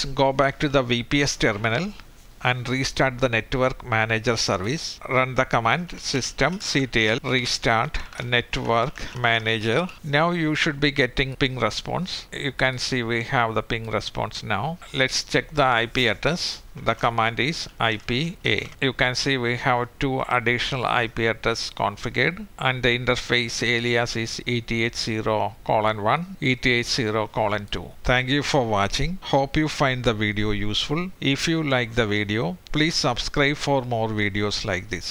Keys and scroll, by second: 15.0 typing.